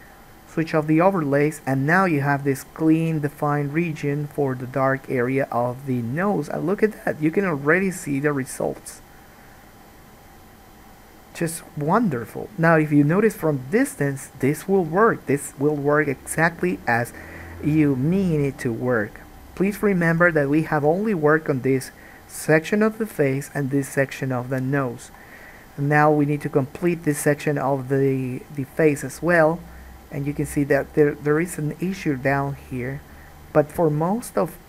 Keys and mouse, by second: 0.8 click, 1.1-34.6 middle drag.